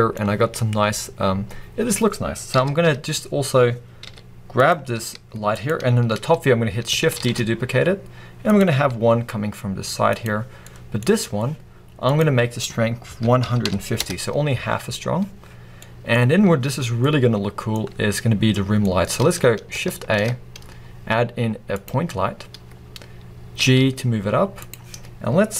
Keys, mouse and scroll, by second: 2.6 KP_7, 3.4-4.0 scroll down 2, 4.0 g, 4.7 click, 5.0 r, 5.7 click, 5.9-7.2 scroll down 1, 7.2 shift+d, 8.6 click, 9.0 r, 10.2 click, 10.7-14.0 middle drag, 11.1-13.7 scroll up 2, 13.7-14.0 scroll up 1, 14.0-15.8 drag, 14.1 Return, 15.8 scroll down 2, 15.8-24.8 middle drag, 16.2-16.9 scroll up 2, 16.9 scroll up 1, 18.3-18.9 scroll down 2, 19.2-20.0 scroll up 2, 20.0-22.0 scroll up 1, 22.0 shift+a, 22.2-22.8 scroll down 2, 22.8-23.7 scroll up 2, 23.7 g, 24.8 click.